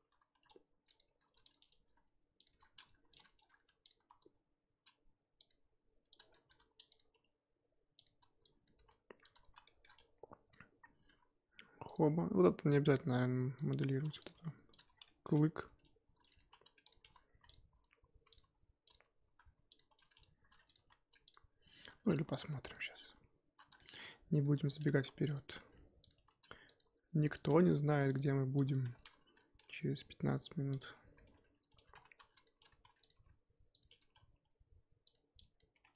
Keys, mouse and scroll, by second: 0.3-4.0 typing, 5.6 scroll up 2, 6.1 click, 6.5 s, 7.0 g, 8.4-8.7 drag, 8.7 g, 9.5 scroll down 1, 9.6 shift+middle drag, 9.9 scroll up 1, 10.5-11.1 scroll down 1, 11.1 e, 13.1-13.9 drag, 13.9 r, 14.3 g, 14.9 scroll down 3, 15.0 shift+middle drag, 15.3-15.6 scroll up 1, 15.6-19.2 typing, 20.3 r, 20.8 g, 21.8 r, 22.2 s, 23.8 shift+middle click, 24.0-24.4 scroll up 1, 24.4-27.5 typing, 28.5 drag, 28.8 2, 29.5 ctrl+b, 32.0 1, 32.2 click, 32.7 r, 33.1 g, 34.0 r, 35.4-35.7 drag, 35.7 g.